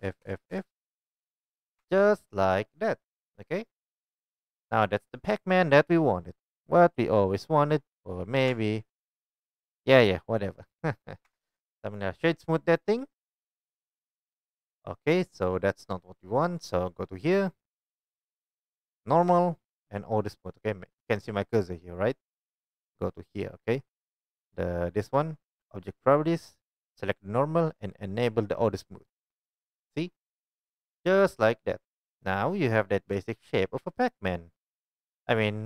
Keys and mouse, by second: 0.0-0.5 typing, 1.8 Tab, 2.7-3.7 drag, 8.5 Tab, 9.9-12.8 middle drag, 11.2 Tab, 12.8-33.2 right drag, 19.2-29.2 drag, 32.1 shift+middle click, 32.3-32.7 middle drag.